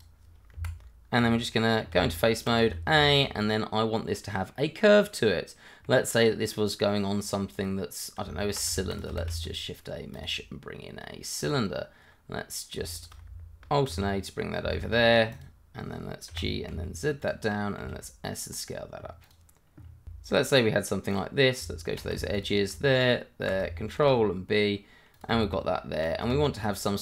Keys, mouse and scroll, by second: 0.5 Escape, 1.9 Tab, 2.6 a, 3.0 shift+middle click, 3.3 middle click, 7.5 click, 8.2 Tab, 8.7 shift+middle click, 9.0 click, 9.2 shift+a, 10.1 click, 12.9 shift+click, 13.1 click, 13.9 alt+a, 14.7 shift+z, 15.3 click, 16.3 g, 16.7 z, 17.2 click, 17.8-21.5 typing, 18.3 click, 19.0 click, 20.4 click, 21.0 click, 22.0 click, 22.1 Tab, 22.4 click, 23.0 shift+click, 24.0 ctrl+b, 25.1 click, 25.3 Tab, 26.3 shift+z, 26.5 click, 26.9 middle click.